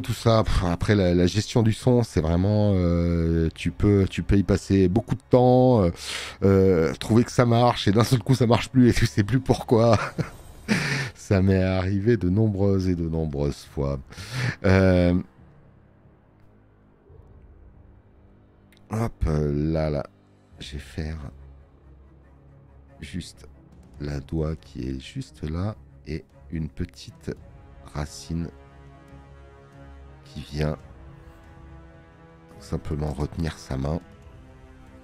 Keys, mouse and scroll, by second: 13.2 space, 13.4 click.